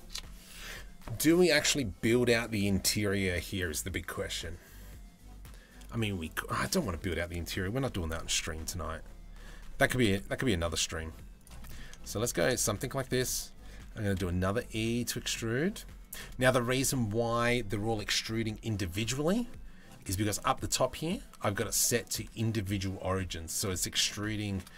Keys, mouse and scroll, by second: 10.1 i, 11.3 middle click, 13.7 e, 16.0 middle click, 19.7-22.8 drag, 23.1 middle click, 23.8 shift+middle click.